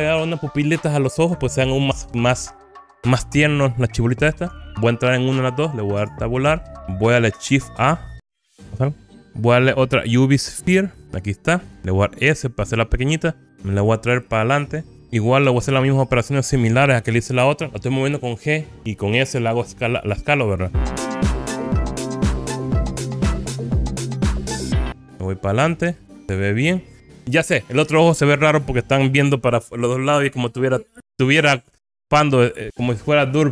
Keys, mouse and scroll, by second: 3.1-4.5 scroll up 4, 4.5 click, 6.1 Tab, 8.5 shift+a, 12.4 s, 13.8 click, 15.0 middle click, 15.0 g, 16.1 middle click, 17.2 KP_1, 20.7 g, 22.3 click, 22.4-22.9 scroll up 6, 22.9-24.3 typing, 23.5 click, 23.9 middle click, 24.5 click, 25.0 click, 25.0 scroll down 2, 25.6 KP_1.